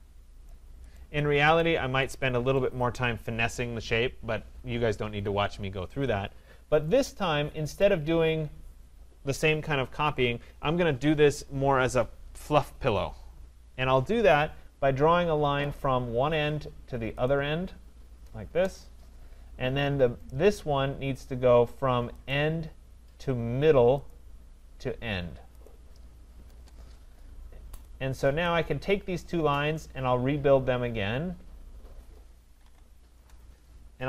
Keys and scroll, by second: 1.9 Escape, 18.5 Return, 26.5 Return, 33.1 Return.